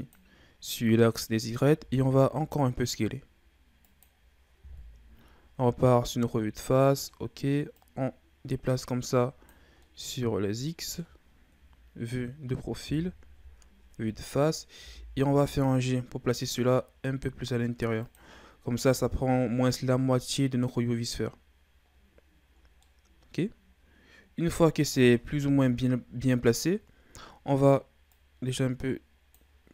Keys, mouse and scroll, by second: 1.7 s, 4.8 KP_1, 5.8 ctrl+scroll down 2, 6.1-7.7 middle drag, 7.7-9.8 drag, 9.8-11.6 middle drag, 11.6 KP_3, 13.2 KP_1, 14.8 g, 18.8-19.9 ctrl+scroll down 4, 19.9-21.3 ctrl+scroll up 1, 21.3-21.8 scroll down 4, 21.8-22.6 scroll up 7, 22.6 scroll down 2, 22.8-25.4 middle drag, 25.4 KP_3, 28.1-29.7 drag.